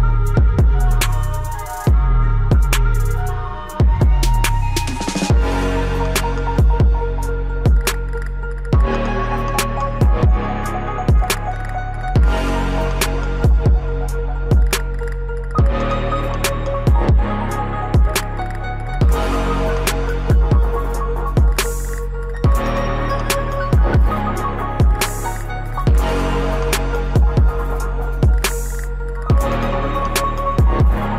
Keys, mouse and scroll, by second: 0.1-6.5 drag, 8.7 click, 13.6 ctrl+shift+q, 14.9 click, 17.1 click, 19.8 click, 21.5 ctrl+shift+q, 21.9 click, 30.1-30.8 scroll down 1, 30.8 click.